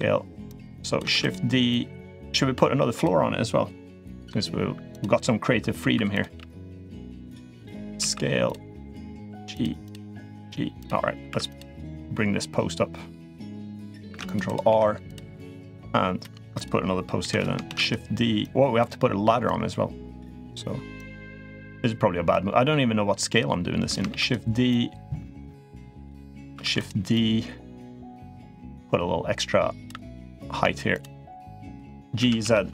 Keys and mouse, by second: 0.3 click, 0.9 shift+d, 1.5-2.8 drag, 3.8 middle click, 4.7 click, 5.8 2, 5.9 click, 6.1 g, 7.7 s, 8.9 g, 9.6 click, 9.8 g, 10.5 click, 11.1 3, 11.3 click, 11.8-13.3 drag, 13.8 ctrl+r, 14.5 3, 14.8 click, 16.3 click, 17.0 l, 17.4 shift+d, 18.2 click, 19.2-20.2 drag, 20.8-22.1 drag, 22.9-23.7 drag, 23.9 shift+d, 24.5-25.8 drag, 26.5 shift+d, 26.9-27.9 drag, 28.6-29.6 drag, 30.1 click, 30.7 shift+click, 31.5 shift+click, 31.9 g.